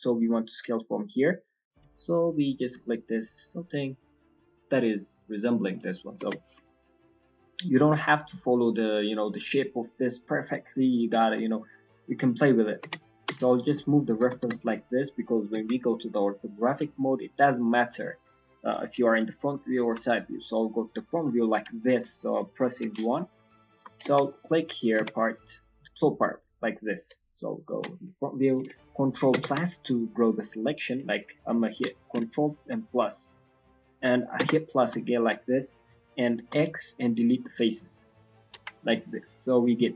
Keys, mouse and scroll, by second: 5.9-6.6 scroll down 5, 6.1 Tab, 6.6 shift+middle click, 7.5-8.8 scroll up 2, 11.0-11.3 scroll up 2, 11.5 shift+middle click, 11.9 middle click, 12.6-12.9 scroll down 3, 12.8 Tab, 12.9 middle click, 13.2 Tab, 13.4 click, 13.7 middle click, 13.9-14.4 scroll down 2, 14.1 g, 15.1-15.6 scroll down 2, 15.5 KP_1, 15.9-16.9 scroll up 11, 17.1-17.4 scroll down 1, 17.4 middle click, 17.4 scroll down 1, 18.9 KP_1, 19.3 KP_3, 19.7 KP_1, 20.0-20.4 scroll down 2, 20.8-21.2 scroll down 3, 21.3 shift+middle click, 21.7 ctrl+middle click, 22.7 KP_1, 23.1-23.4 scroll up 4, 23.6 shift+middle click, 24.0 Tab, 24.2 middle click, 24.6 click, 24.9 Tab, 25.4 click, 26.1 click, 27.6 KP_1, 29.3 ctrl+KP_Add, 30.1 middle click, 31.7 ctrl+z, 32.9 ctrl+KP_Add, 36.5 x, 37.9 scroll down 1, 38.1 middle click, 38.5 KP_1, 38.8 scroll up 1, 39.7 scroll.